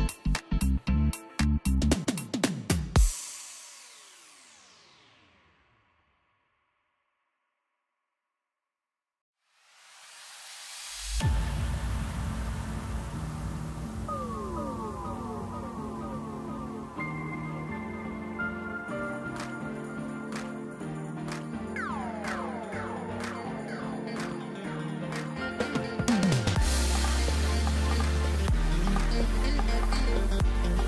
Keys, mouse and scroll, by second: 0.2-0.7 scroll up 2, 0.7-1.9 scroll down 1, 1.9 scroll down 1, 1.9 g, 5.1-7.4 scroll up 1, 7.4 e, 12.7-13.1 scroll down 3, 13.1 middle click, 14.1-14.6 scroll down 5, 14.9 middle click, 15.3-16.1 scroll up 2, 16.1 3, 16.6 click, 17.1-18.1 middle drag, 18.1 scroll up 1, 19.2-26.2 drag, 28.7-30.6 drag.